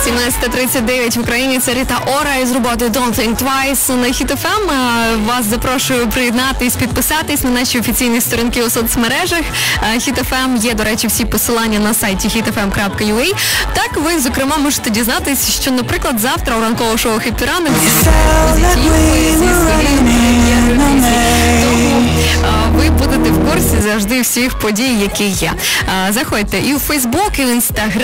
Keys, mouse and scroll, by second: 24.6 Page_Down.